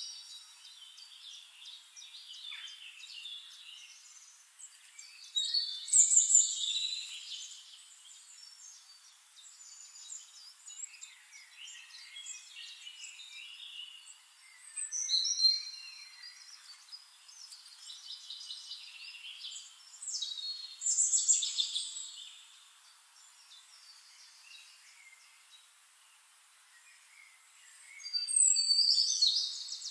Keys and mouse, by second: 0.1 p, 0.3 o, 0.5 p, 2.3 click, 4.0-17.2 drag, 15.6 right click, 16.0 right click, 19.4-24.4 drag, 24.5-28.6 ctrl+shift+drag, 29.6 click.